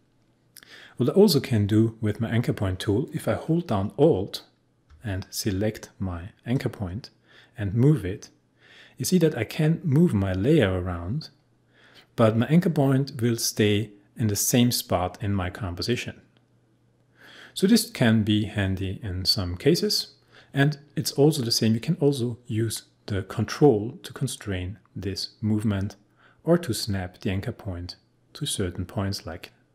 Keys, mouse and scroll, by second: 4.9 alt+space, 6.5-16.5 alt+drag.